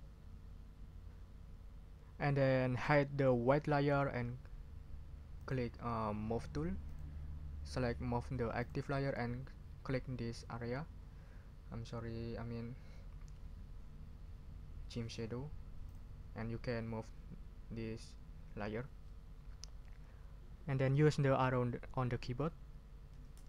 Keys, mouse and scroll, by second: 5.4 click, 6.9 click, 8.6 click, 15.9 click, 23.1 Down.